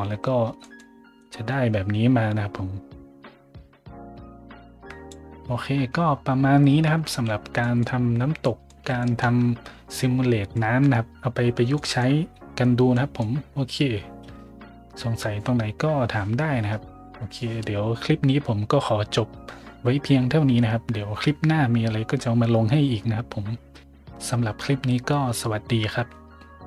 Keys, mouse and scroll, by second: 0.6 middle drag, 1.2-4.8 drag, 4.8 right click, 6.9 a, 7.1 scroll up 1, 7.6 middle click, 8.4 middle drag, 9.0 shift+middle drag, 9.4 middle click, 10.5 middle drag, 11.4 middle click, 11.5 scroll up 1, 11.8 middle click, 12.9 middle drag.